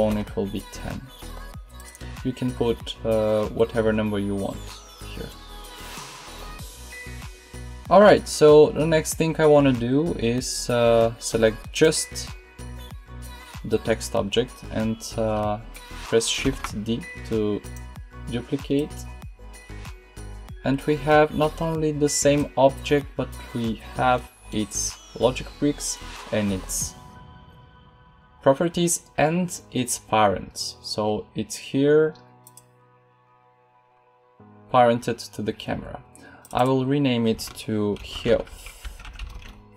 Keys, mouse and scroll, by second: 16.3 shift+d, 21.3-23.7 drag, 38.4-39.7 drag.